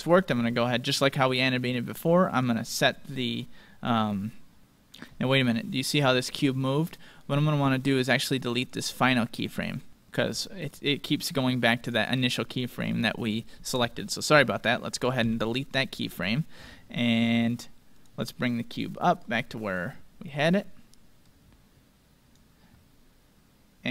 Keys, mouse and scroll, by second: 1.0-4.2 drag, 8.4-9.9 right drag, 11.3-13.1 drag, 15.2 x, 17.9-23.1 drag.